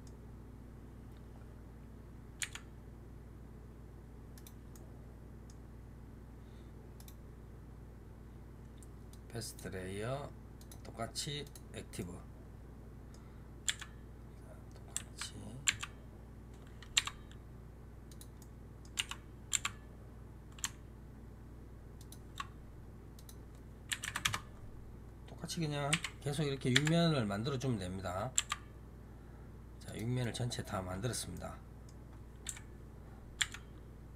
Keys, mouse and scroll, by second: 2.3 g, 4.6-6.8 middle drag, 6.8 right click, 10.5-11.8 drag, 11.8-13.5 middle drag, 13.5 g, 18.3 middle click, 18.8 r, 23.0-25.8 drag, 25.8 KP_1, 26.6 g, 30.1-32.3 middle drag, 32.3 KP_7, 33.3 g.